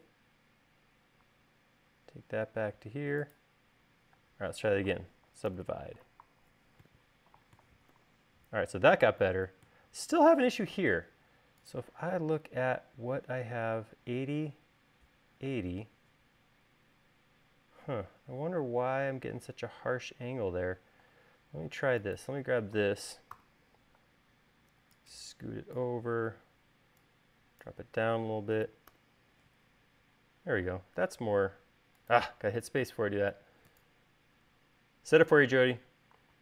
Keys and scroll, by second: 4.8 u, 6.0 u, 8.5 u, 21.6 u, 23.9 v, 29.5 u, 31.2 space, 33.4 space.